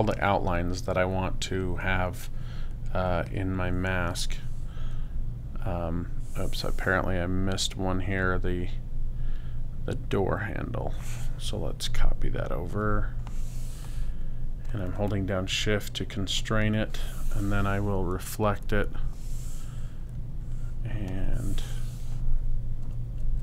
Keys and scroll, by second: 22.8 Right.